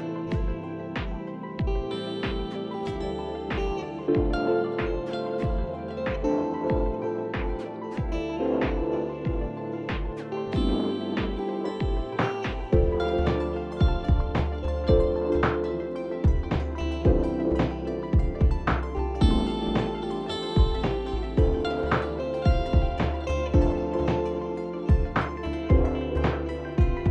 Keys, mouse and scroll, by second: 2.5 click, 3.0 click, 3.3 click, 3.6 click, 3.9 click, 4.2 click, 4.6 click, 6.4 click, 8.1 click, 8.6 click, 10.8-12.1 alt+scroll, 12.1 click, 13.1 click, 13.6 click, 15.2 click, 15.6 click, 18.1 click, 18.5 click, 18.7 click, 18.9 click, 19.9 click, 20.0 click, 20.4 click, 20.6 click, 20.7 click, 21.0 click, 21.1 click, 21.4 click, 21.5 click, 21.7 click, 21.8 alt+scroll, 22.2 click, 23.2 ctrl+click, 23.2-23.7 alt+scroll down 1, 23.8 Down, 24.7 Down, 24.7 click, 25.2 Down.